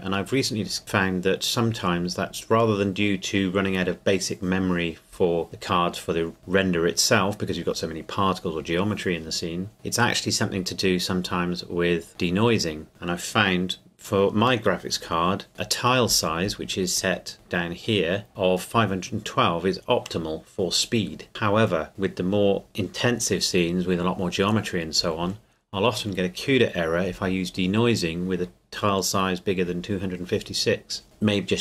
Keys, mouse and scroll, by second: 12.1 click, 15.5 click, 15.7-17.3 scroll down 1, 17.3-18.3 scroll up 1.